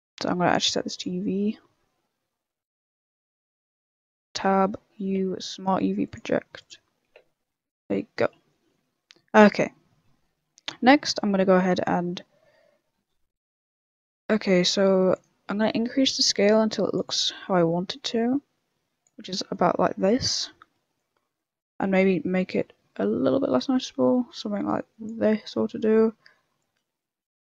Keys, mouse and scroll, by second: 0.4 click, 4.1 Tab, 5.1 u, 7.2 Tab, 7.5 middle click, 8.5 shift+middle click, 11.1 middle click, 11.8 click, 14.0 click, 17.0 click, 19.3 middle click, 19.9 middle click, 22.4 click, 25.2 middle click, 26.5 click.